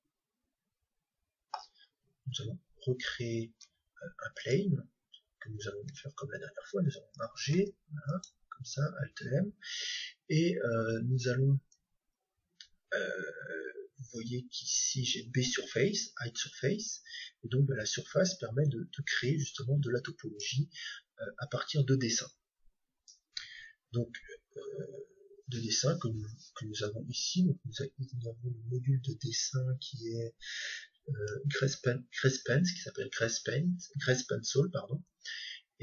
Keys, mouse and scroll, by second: 3.5 shift+a, 5.9 Tab, 7.5 alt+m, 11.7-13.6 drag, 18.6-20.6 drag, 26.8-28.7 drag.